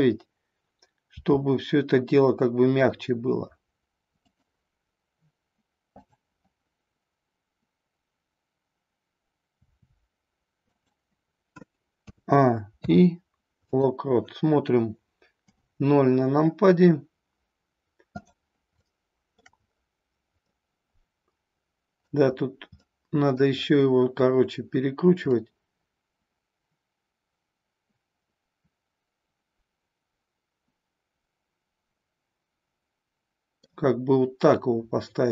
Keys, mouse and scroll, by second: 1.2 r, 6.1-9.0 drag, 9.4 r, 10.8 click, 11.9 a, 12.7 i, 15.3 KP_0, 18.1 click, 18.8-19.4 shift+middle drag, 20.4-22.0 middle drag, 22.7-23.4 middle drag, 25.3-33.7 middle drag.